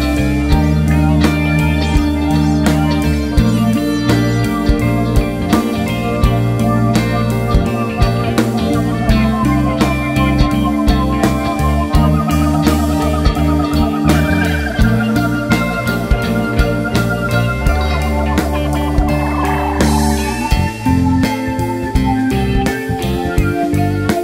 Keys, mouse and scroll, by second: 0.0 `, 0.4 Tab, 0.8 alt+shift+click, 1.2 s, 2.8 Tab, 2.9 `, 4.3 Tab, 4.6 alt+click, 5.1 click, 5.8 s, 6.5 `, 7.2 1, 7.3 click, 7.6 shift+click, 8.0 g, 8.6 click, 9.1 g, 10.2 alt+click, 10.6 e, 11.0 s, 11.8 g, 12.2 click, 12.4 Tab, 12.4 scroll down 1, 12.7 `, 13.2 scroll up 1, 13.5 Tab, 14.4 click, 14.6 scroll down 1, 14.8 Tab, 14.9 `, 15.2 middle click, 15.6 Tab, 16.0 alt+click, 16.1 `, 16.5 e, 18.8 KP_3, 20.2 g, 21.2 click, 21.4 Tab, 21.7 z, 21.8 `, 22.2 Tab, 22.6 2, 22.9 alt+click, 23.4 ctrl+e, 23.6 click, 23.8 scroll down 1, 24.0 alt+a.